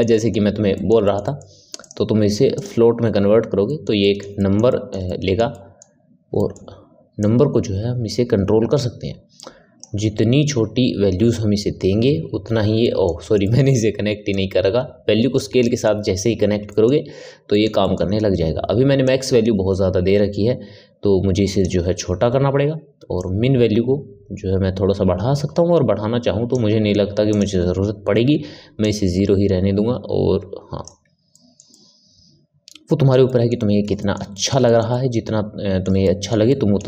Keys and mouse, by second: 1.7-3.6 drag, 3.6-7.1 ctrl+middle drag, 7.1-10.1 drag, 12.8-14.2 middle drag, 14.2-15.6 drag, 15.6-19.0 middle drag, 19.0-22.0 drag, 23.1-26.2 drag, 27.2-31.3 drag, 31.3-36.8 ctrl+middle drag.